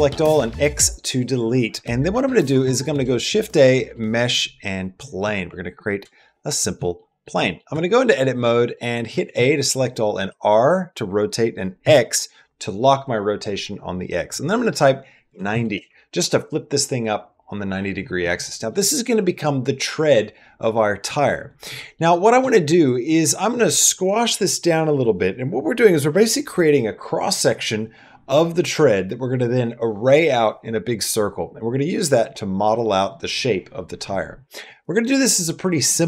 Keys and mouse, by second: 0.1 x, 1.8 shift+middle click, 2.1 middle click, 2.7 shift+a, 5.9 shift+middle click, 6.2 middle click, 6.6 middle click, 6.9 middle click, 7.2 middle click, 7.5 Tab, 7.8 middle click, 8.2 middle click, 8.5 click, 9.2 click, 9.2 a, 9.6 click, 10.1 r, 18.0 click, 21.6 middle click, 22.3 shift+middle click, 22.9 middle click.